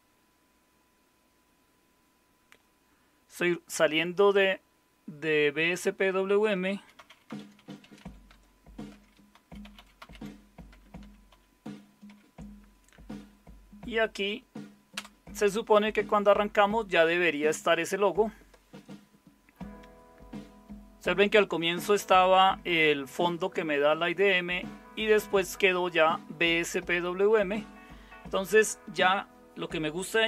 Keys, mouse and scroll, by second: 6.4-12.0 typing, 6.7 click, 8.9 Tab, 14.9 Return.